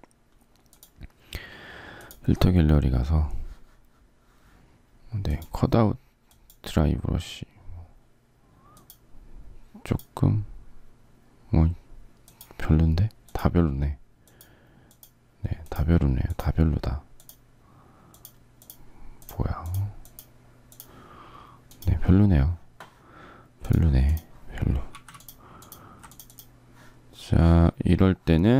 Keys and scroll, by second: 24.8 z.